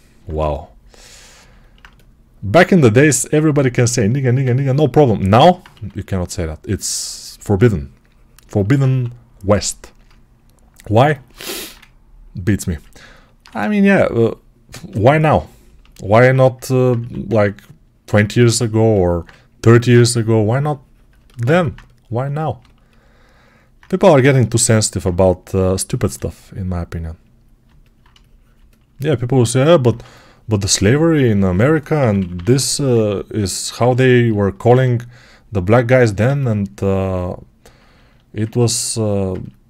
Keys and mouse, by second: 3.7-24.4 alt+drag, 5.6 2, 8.7 1, 13.3 2, 16.8 1, 24.4-29.7 alt+right drag, 25.9 g, 31.1 1, 31.8 [, 32.0 [, 34.6-38.3 shift+drag.